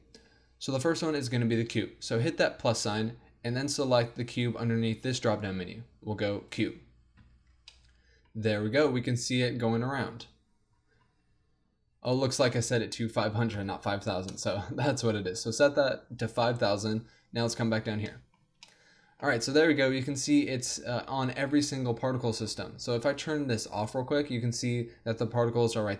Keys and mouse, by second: 2.6-5.0 drag, 7.5 middle click, 8.9 z, 10.0 z, 12.1-16.2 drag, 16.2-18.1 middle drag, 18.5 z, 21.7 middle click, 21.9-23.7 middle drag, 23.7-25.5 drag.